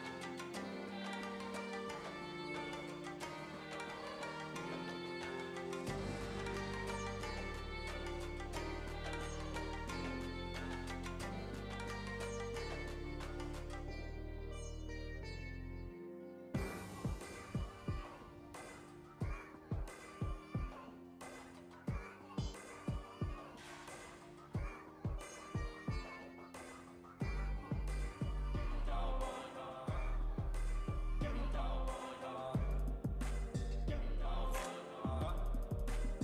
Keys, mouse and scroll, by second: 3.2-5.1 drag, 5.4 shift+click, 6.3-11.1 drag, 11.3-17.3 shift+drag, 17.3 click, 18.8-20.2 drag, 20.5 click, 21.1 shift+click, 21.9 shift+click, 22.8-25.2 drag, 25.4-27.3 drag, 27.7 click, 28.6-32.3 drag, 32.5 click, 34.4 ctrl+z, 36.0-36.2 drag.